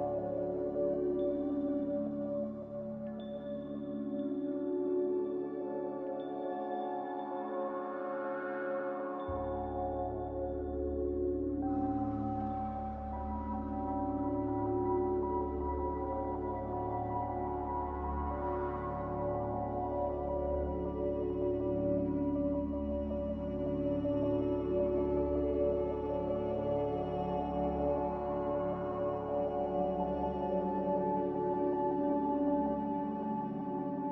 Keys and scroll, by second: 25.7 F9, 27.3 Delete, 28.9 Delete, 29.8 z, 32.0-32.9 typing, 34.0-34.1 typing.